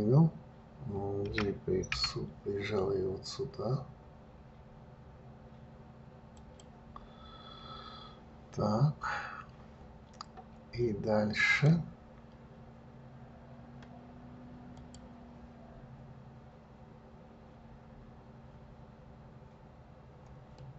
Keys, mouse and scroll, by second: 1.6 g, 11.9-14.9 drag.